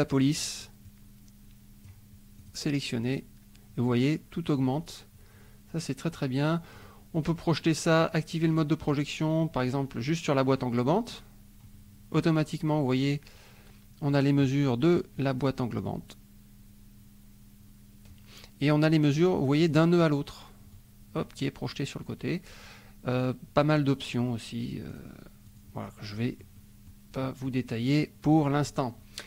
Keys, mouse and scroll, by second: 0.8-2.0 drag, 2.4 click, 6.7 click, 8.5 click, 10.5 click, 11.6 middle click, 11.9 click, 15.2-18.3 drag, 19.6 click, 20.7 click, 23.1 click, 24.9 click, 25.4 click, 26.1 click, 27.2 click, 27.4 middle click.